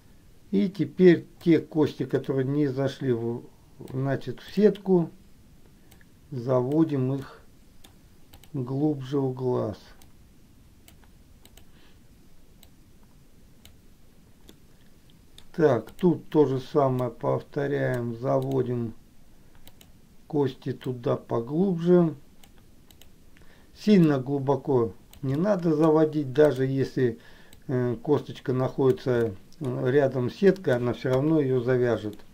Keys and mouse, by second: 1.6-4.2 drag, 4.8 click, 6.1 click, 7.6 middle click, 10.4 click, 11.7 click, 12.9-13.9 drag, 14.8 middle click, 16.0 click, 17.3 click, 18.8 click, 19.8 click, 21.1-22.8 drag, 23.0 click, 24.4-25.6 drag, 25.6 middle click, 26.8 click, 27.9-29.2 drag, 29.5 middle click, 30.8 middle click, 31.3 KP_1.